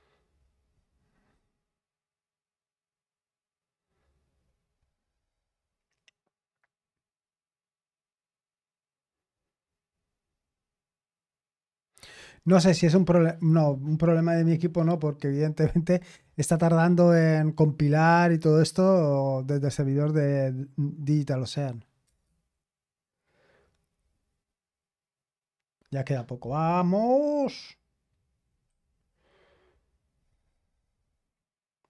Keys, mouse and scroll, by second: 22.0 Return.